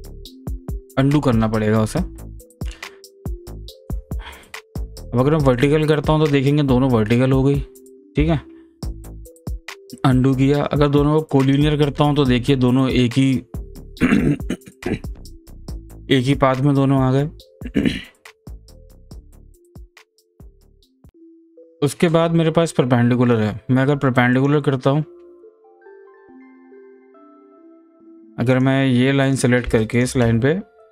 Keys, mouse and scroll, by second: 1.0 ctrl+z, 4.1 ctrl+z, 5.5 click, 8.1 click, 8.7 ctrl+z, 11.4 click, 20.0 click, 20.7 ctrl+z, 24.3 click, 26.0 ctrl+z, 27.3 click, 29.2 click.